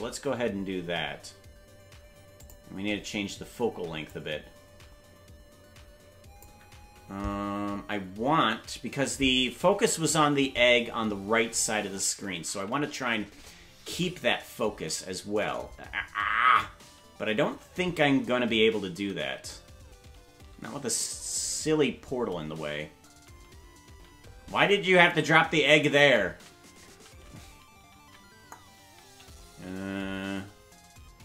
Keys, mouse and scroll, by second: 2.4 click, 4.1-6.4 drag, 11.7 shift+`.